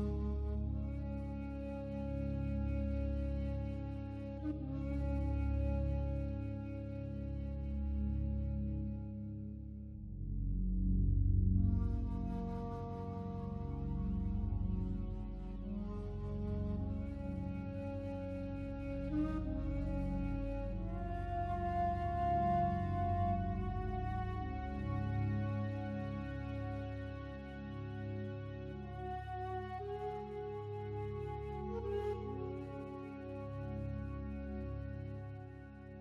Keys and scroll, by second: 3.1 ctrl+t, 17.2 ctrl+t, 29.7 ctrl+t.